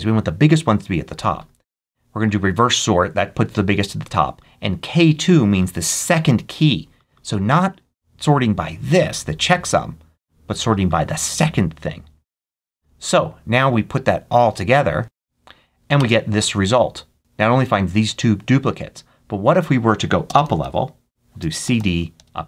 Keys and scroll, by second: 15.0 Right, 15.8 Return, 20.1-21.5 typing, 22.0 Return.